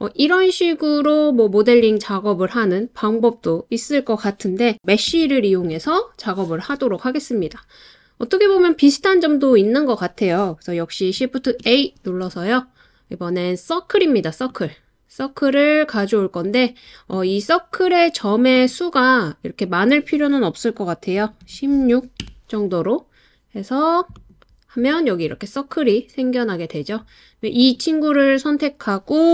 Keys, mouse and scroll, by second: 5.1 x, 11.4 shift+a, 17.1 click, 18.6-22.2 drag, 24.2 click, 27.6 click.